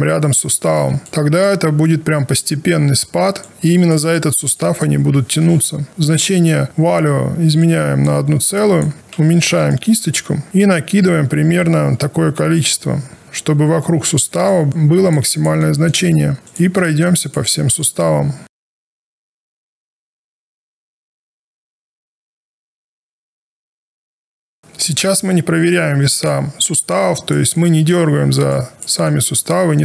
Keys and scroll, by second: 9.6 b.